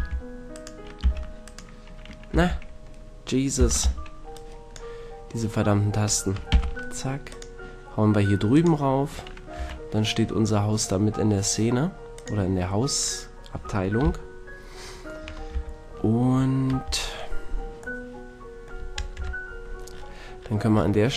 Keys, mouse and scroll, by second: 0.0 alt+h, 1.0 g, 2.4 z, 3.6 z, 3.8 b, 6.5 m, 8.6-10.0 drag, 9.6 a, 10.0-10.6 middle drag, 12.2-13.0 drag, 13.0-14.0 middle drag, 14.0 KP_1, 15.5 KP_7, 16.8 KP_1, 19.2 KP_Decimal.